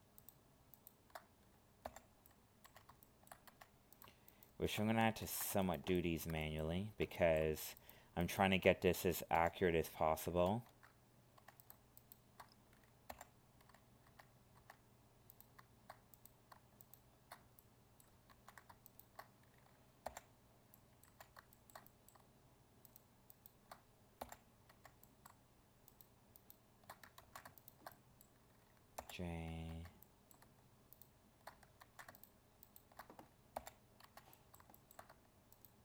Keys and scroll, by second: 5.2 ctrl+z, 10.4 ctrl+z, 18.3 ctrl+z, 27.2 ctrl+z, 31.8 ctrl+z.